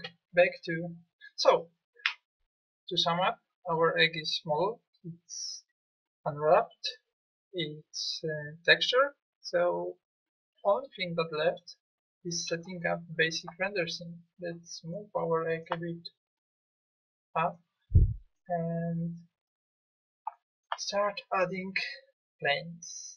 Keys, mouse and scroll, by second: 0.0 Escape, 11.3-13.3 middle drag.